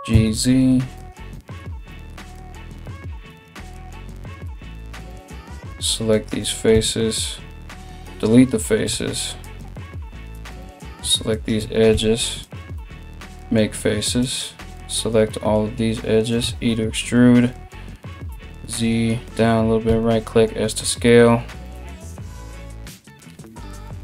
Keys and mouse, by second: 2.4 3, 2.9 right click, 3.0 shift+middle click, 3.3 right click, 3.5 middle click, 4.1 right click, 4.2 middle click, 4.4 right click, 4.5-5.7 middle drag, 5.7 shift+right click, 5.8-9.0 shift+middle drag, 6.3 x, 8.4 2, 9.0 right click, 9.2-24.0 middle drag, 9.9 right click, 10.9 shift+right click, 12.0 right click, 12.0 f, 12.4 f, 13.8 alt+right click, 16.0 e, 19.5 s.